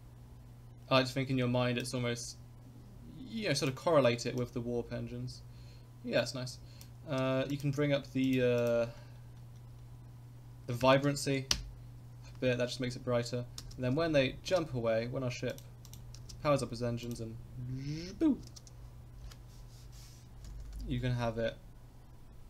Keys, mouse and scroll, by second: 3.6 click, 13.6 space, 14.6 space, 15.5 click, 15.9 click, 16.2 space, 17.1 click, 18.5 space, 20.5 Left, 20.8 Left, 21.0 Left, 21.1 Left, 21.3 Left.